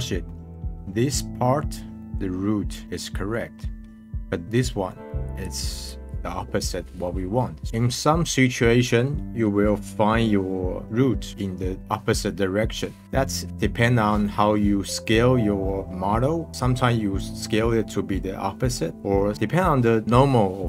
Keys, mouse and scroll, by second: 0.0 scroll up 2, 0.2-0.7 middle drag, 2.0-3.5 middle drag, 4.7-5.2 middle drag, 5.2-7.7 drag, 7.7-9.8 middle drag.